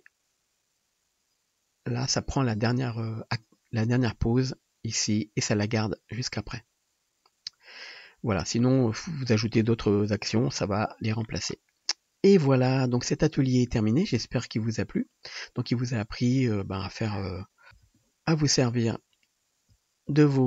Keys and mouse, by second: 15.1-15.7 middle drag, 16.3-20.4 drag, 16.3-16.9 middle drag, 16.3-16.9 right drag, 17.7 KP_7, 17.9 ctrl+Tab, 19.2 middle click, 19.2 right click, 20.2 shift+d.